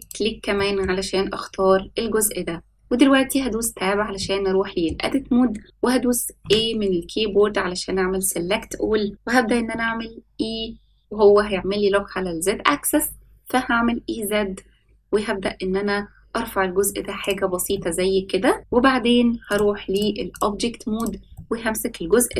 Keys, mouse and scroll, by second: 0.5 middle click, 1.6-3.3 scroll up 2, 3.3 Tab, 4.1 middle click, 6.4 a, 9.6 e, 17.7 middle click, 19.5 click, 20.3 click, 20.9 click, 21.3-22.3 middle drag.